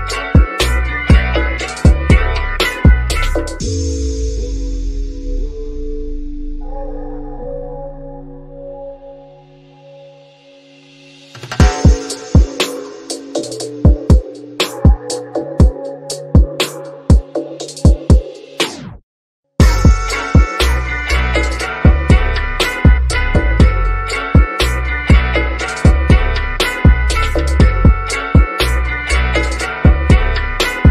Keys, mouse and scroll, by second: 7.0 click, 8.6 scroll up 1, 10.6 click, 11.3 scroll down 1, 14.0 scroll up 1, 14.5 click, 16.3 click, 19.3 shift+middle click, 20.1 scroll up 1, 21.1 middle click, 21.7 scroll down 1, 22.3-23.5 shift+middle drag, 23.7-27.2 shift+middle drag, 27.2-27.5 scroll up 1, 28.2-28.8 scroll down 1, 28.8 click.